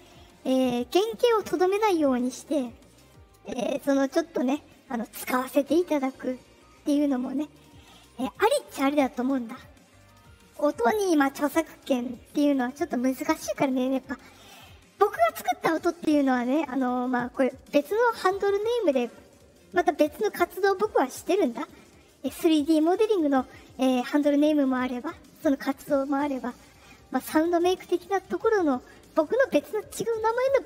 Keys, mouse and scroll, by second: 3.4 right click, 9.5 click.